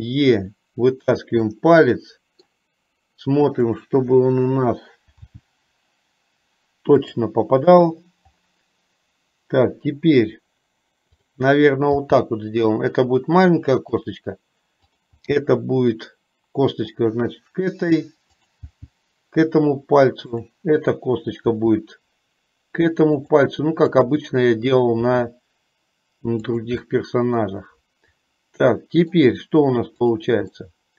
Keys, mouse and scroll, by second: 1.6-2.6 middle drag, 3.8 click, 5.4 g, 12.1 g, 15.0 click, 15.5 g, 18.4 click, 19.0 g, 24.0 click, 25.1 e, 27.0-29.3 middle drag, 30.6-30.9 middle drag.